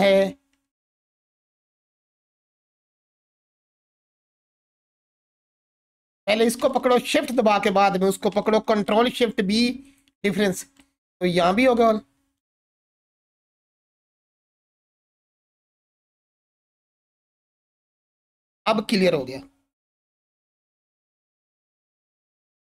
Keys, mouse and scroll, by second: 1.5 3, 3.0 g, 4.0 click, 4.7-6.2 alt+drag, 8.9 ctrl+shift+b, 9.8 click, 11.1-13.0 alt+drag.